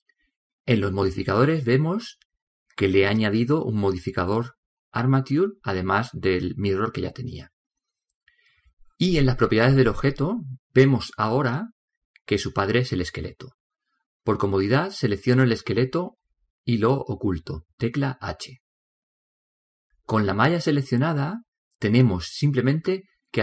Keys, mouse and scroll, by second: 2.6-5.3 drag, 8.7-11.6 drag, 16.6 right click, 19.4 h, 21.8 right click.